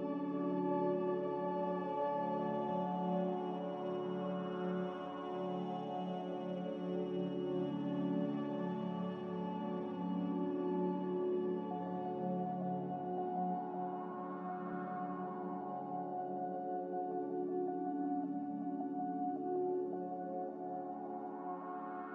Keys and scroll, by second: 19.9 x.